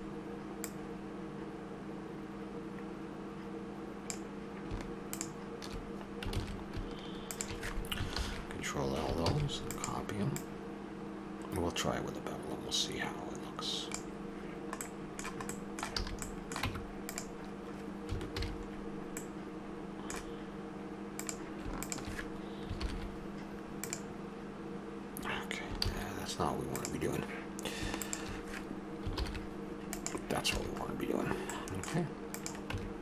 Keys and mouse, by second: 0.6-2.0 drag, 5.1-6.3 drag, 6.3 ctrl+z, 8.1 ctrl+l, 9.3 shift+d, 10.4-12.2 drag, 14.8-16.0 middle drag, 16.0 a, 16.6 Tab, 18.4 alt+h, 21.2 right click, 21.8-23.9 drag, 22.8 ctrl+l, 25.8 ctrl+z, 26.7-29.9 drag, 29.1 ctrl+l, 30.6 a, 32.3-33.0 right drag.